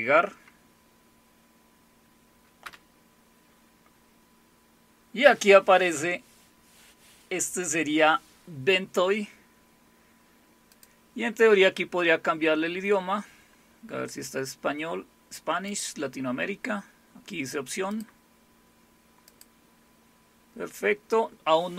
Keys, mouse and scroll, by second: 2.6 Return, 10.7 click, 11.8-12.6 scroll down 5, 13.3-13.8 scroll down 2, 13.8-14.2 scroll up 1, 15.7 click, 17.9 click, 19.3 click.